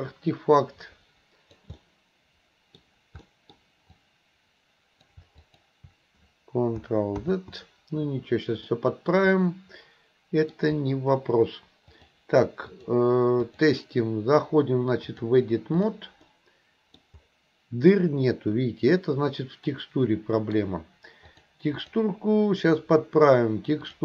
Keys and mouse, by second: 1.8-2.8 middle drag, 3.3 middle click, 4.0-5.1 drag, 5.4 shift+click, 7.2 ctrl+z, 8.7 middle click, 9.4-10.5 middle drag, 11.9 click, 13.4 click, 15.1 click, 16.3 middle click, 18.0-20.5 middle drag, 21.4 click.